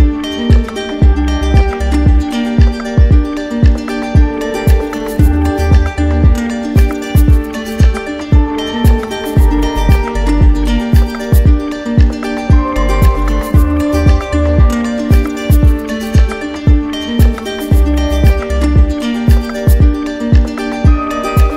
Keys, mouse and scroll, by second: 0.4 click, 4.2-5.2 drag, 5.8-6.6 typing, 7.1 Return, 13.1-14.2 right drag, 15.3 right click, 16.5 click, 17.6 alt+click, 18.7 d, 18.9 d, 19.7 d.